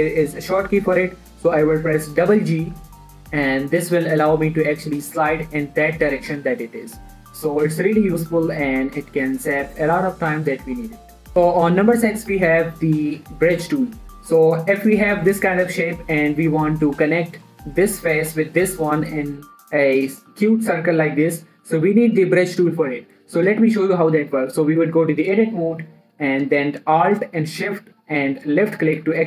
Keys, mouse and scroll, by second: 3.2 g, 3.4 g, 10.3 click, 10.6 middle click, 12.9 middle click, 15.3 scroll down 1, 15.3 middle click, 23.7 scroll up 1, 24.1 shift+middle click, 25.4 click, 28.2 alt+shift+click.